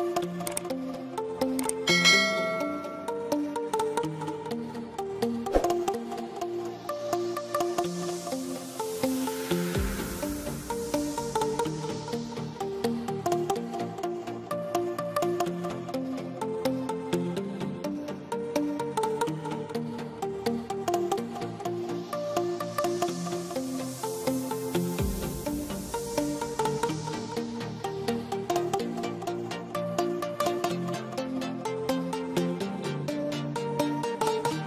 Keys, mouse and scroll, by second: 0.7 middle click, 0.7 typing, 2.2 click, 6.6 ,, 7.7 click, 8.1 scroll down 1, 8.5 middle click, 9.4 right click, 10.5 click, 12.8 ctrl+v, 13.3 space, 13.6 click, 14.5 typing, 14.9 click, 17.0 p, 17.6 click, 19.4 middle click, 20.1 scroll up 1, 20.9 middle click, 22.3 click, 24.6 ctrl+z, 25.4 click, 26.2 ctrl+z, 27.0 click, 28.9 middle click, 29.6 click, 31.1 click, 33.3 shift+click, 34.5 shift+right click.